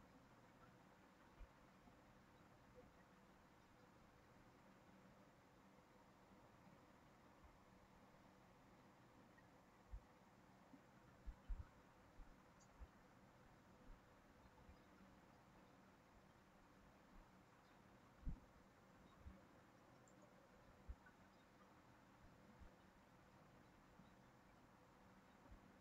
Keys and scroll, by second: 12.2 ctrl+c, 12.3 ctrl+v, 24.5 ctrl+c, 24.7 ctrl+v.